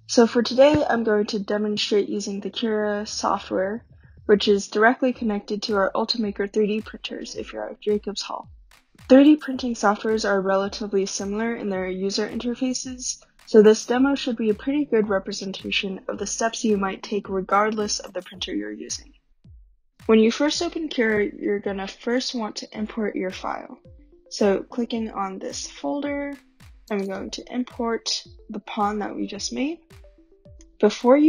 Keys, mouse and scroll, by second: 22.4 click, 26.9 click, 27.1 click, 29.7-30.5 scroll, 30.3 click.